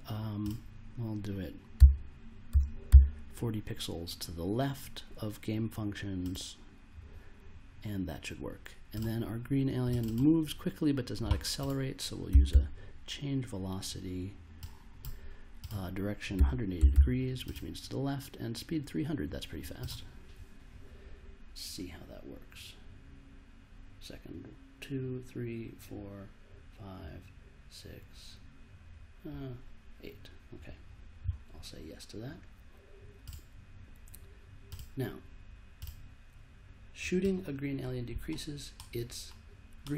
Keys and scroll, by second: 1.8 -, 2.5 4, 2.8 0, 12.0-13.0 typing, 16.1-17.4 typing.